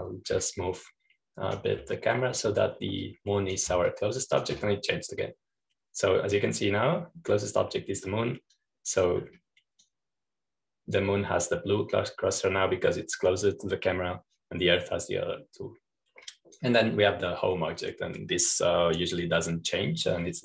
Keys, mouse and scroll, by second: 0.0-2.3 drag, 2.3-2.7 scroll down 1, 2.7-4.1 drag, 4.9-7.0 drag, 10.5-11.6 drag, 11.7-13.6 drag, 18.2 click.